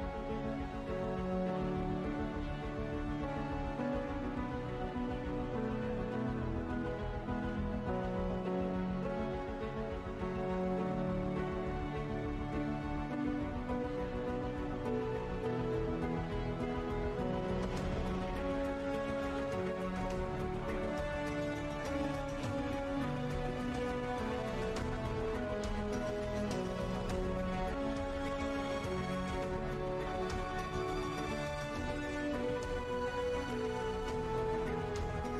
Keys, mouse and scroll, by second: 5.4 click, 8.0 scroll, 8.2-8.6 scroll down 1, 9.8 scroll down 1, 11.5 click, 14.6 scroll down 1, 16.5 scroll down 1, 18.7 scroll down 1, 19.6 scroll down 1, 21.1 scroll down 1, 22.0 scroll down 1, 23.0 scroll down 1, 24.2 scroll down 1, 26.8 click, 27.4 Tab, 30.6-33.5 typing, 32.4 Tab, 33.8 Return.